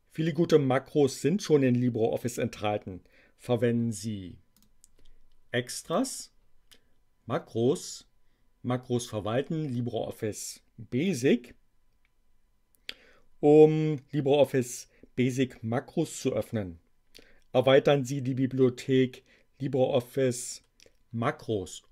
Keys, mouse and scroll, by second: 4.6 click, 5.8 click, 11.0 click.